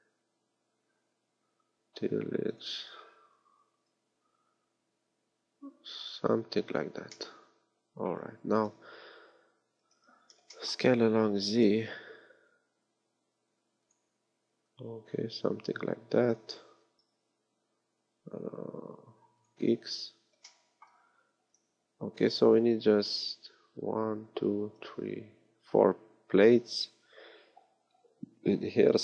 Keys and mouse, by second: 3.3-5.1 drag, 3.3 s, 7.2-8.6 drag, 8.7 KP_1, 9.2 KP_3, 9.6 KP_1, 10.0 z, 11.4 s, 14.6 click, 16.8 s.